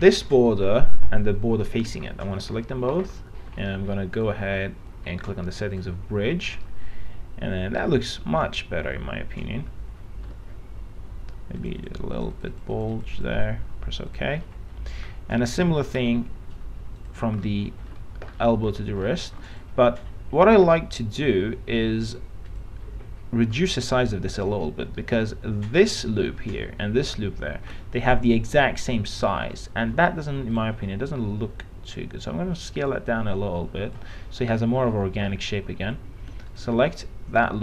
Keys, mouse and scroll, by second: 0.5 alt+middle click, 2.3 middle click, 2.6-3.3 scroll up 1, 3.9 middle click, 6.0 click, 7.5-10.5 alt+middle drag, 11.8 click, 14.7 middle click, 15.3-16.0 scroll down 1, 16.0 click, 17.2 ctrl+click, 17.7 alt+middle click, 18.6 middle click, 18.9-19.2 scroll up 1, 19.2 alt+middle click, 20.1-23.8 drag, 23.8 middle click, 30.7-34.7 drag, 34.7-35.9 middle drag, 36.7 ctrl+click.